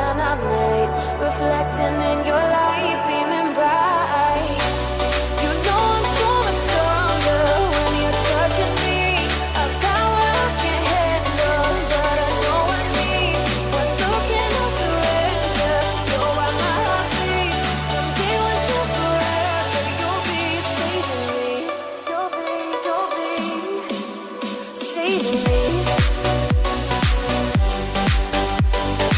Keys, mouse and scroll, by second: 0.9-1.4 scroll up 1, 1.4 middle click, 1.9 middle click, 2.7 shift+middle click, 3.4 scroll down 1, 3.9 middle click, 4.7-6.6 drag, 6.6 scroll down 1, 7.0-10.5 drag, 11.3 click, 12.1 typing, 13.4-17.1 drag, 17.4 click, 18.0 typing, 18.7 click, 19.8-22.7 drag, 23.4-23.8 typing, 24.4 click, 25.3 scroll up 1, 26.7-28.0 drag, 28.0-29.1 middle drag.